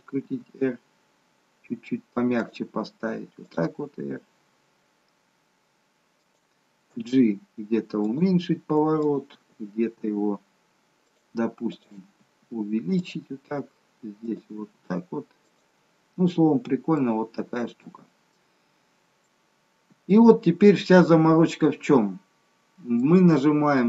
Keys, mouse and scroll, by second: 0.3 r, 3.5 click, 3.8 r, 7.0 g, 9.1 click, 9.4 g, 11.7 click, 12.2 g, 14.4 click, 14.7 g, 16.2-17.0 scroll up 6, 17.0 middle click, 18.5 middle click, 19.6-20.2 scroll up 1, 20.2 middle click.